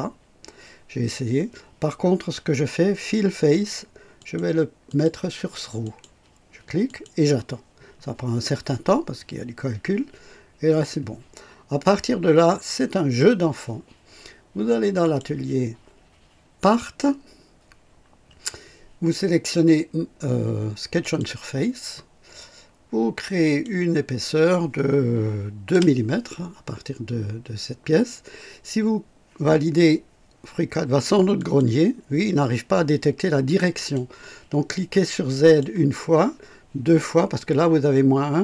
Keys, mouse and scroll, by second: 4.1 click, 4.8 click, 5.8 click, 6.8 click, 11.6 scroll up 2, 12.3 scroll down 2, 12.7-13.3 right drag, 15.0 click, 16.5 click, 21.0 click, 23.4 click, 25.6 KP_2, 31.3 click, 33.7 click, 35.4 click.